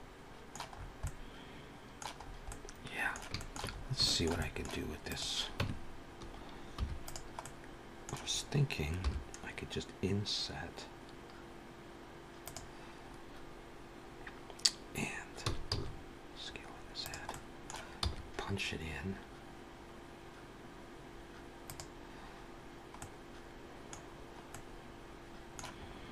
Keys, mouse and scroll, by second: 0.6 scroll up 4, 0.8 middle click, 2.0 scroll up 2, 2.3 middle click, 3.2 shift+middle click, 3.6 scroll up 2, 3.9 shift+middle click, 4.2 middle click, 4.8 click, 5.5 Tab, 6.6 3, 6.9 click, 7.2 middle click, 8.7 i, 15.3 s, 17.1 middle click, 17.9 e, 22.8 middle click, 23.9 scroll down 2, 24.4 middle click, 25.6-25.9 scroll up 2, 25.9 middle click.